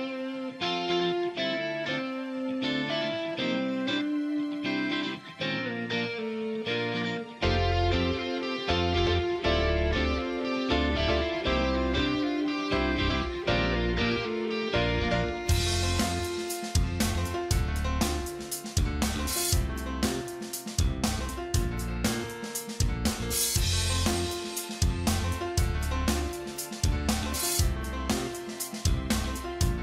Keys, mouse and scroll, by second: 0.9 click, 4.7 ctrl+click, 9.1-10.7 typing, 11.4 click, 12.2 ctrl+z, 12.7 [, 12.8 [, 12.9 [, 13.3 click, 14.7 ctrl+z, 15.3 ], 15.4 ], 15.8 ], 16.3 click, 17.4 right click, 18.0 click, 18.8 space, 21.5-29.1 alt+shift+drag.